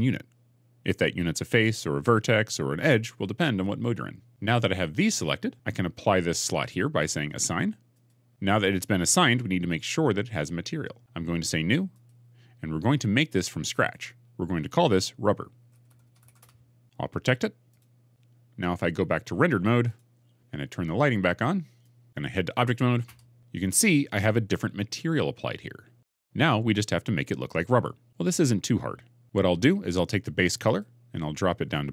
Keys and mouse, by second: 7.9 click, 11.8 click, 13.8-15.9 drag, 15.9 b, 21.7 click, 22.9 Tab, 30.5 click.